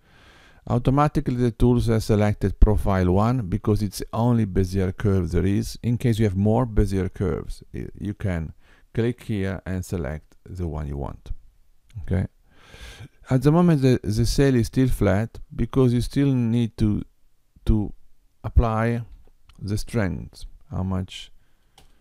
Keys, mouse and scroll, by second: 9.4 click, 16.8 click.